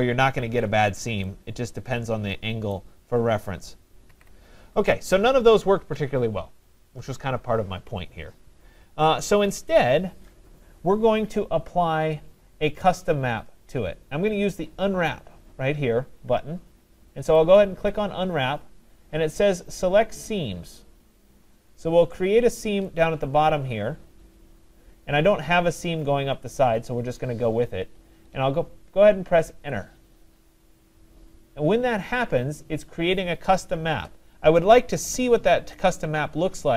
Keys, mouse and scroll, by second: 2.7 right click, 4.1 ctrl+z, 5.2 right click, 9.6-10.0 right drag, 10.1 right click, 17.6 click, 21.5 middle click, 21.6 middle click, 23.0 click, 29.5 Return, 30.8-32.1 scroll, 32.1-35.0 middle click.